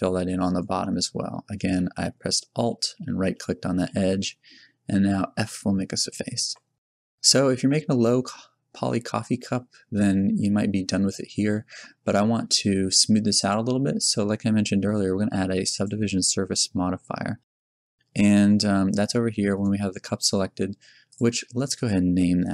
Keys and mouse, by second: 5.2 f, 6.5 Tab, 9.8 Tab, 9.8 f, 11.0-13.3 middle drag, 18.0-19.2 middle drag.